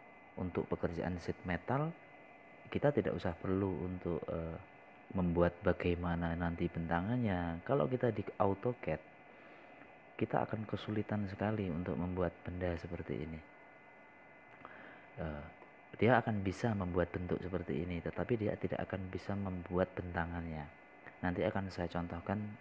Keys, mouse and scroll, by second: 15.8-19.0 middle drag.